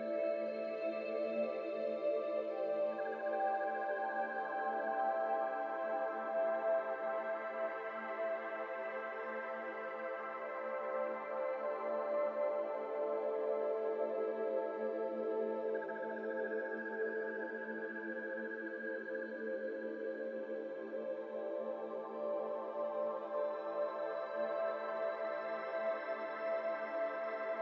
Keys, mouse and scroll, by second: 0.9 ctrl+s, 1.3 scroll down 2, 1.3 middle drag, 1.6 click, 1.8 shift+middle click, 2.7 click, 2.9-4.2 shift+middle drag, 4.2 KP_1, 5.0 shift+middle drag, 5.2-6.0 scroll up 1, 6.4 shift+a, 7.0 shift+a, 9.7-10.0 scroll down 2, 10.0-10.3 shift+middle drag, 10.3-11.0 scroll down 4, 11.0 r, 15.1-16.1 scroll down 5, 16.1-17.4 drag, 17.4 shift+middle drag, 17.5 scroll up 2, 17.7 g, 18.5 z, 18.5 z, 19.1 shift+middle drag, 19.3-19.6 scroll up 1, 19.6-21.0 shift+middle drag, 21.0 BackSpace, 21.5 Tab, 21.7 BackSpace, 21.9-22.7 BackSpace, 23.3 shift+j, 24.1 Tab, 25.6-27.6 drag.